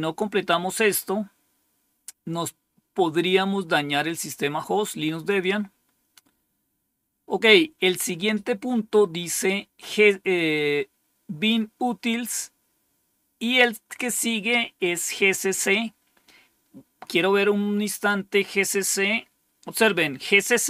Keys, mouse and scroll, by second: 5.1 click, 17.8 click.